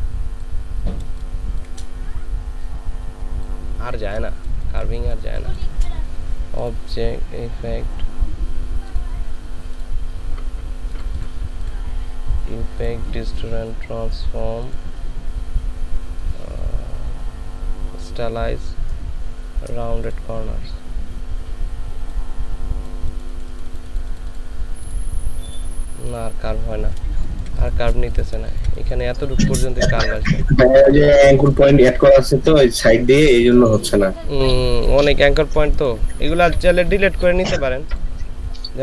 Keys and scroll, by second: 1.1 ctrl+space, 3.9 ctrl+space, 27.2 ctrl+space, 28.4 ctrl+space.